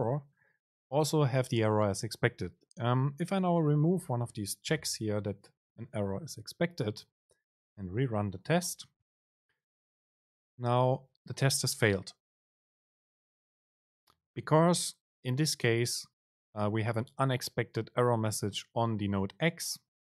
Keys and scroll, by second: 4.9 BackSpace, 8.3 super+r.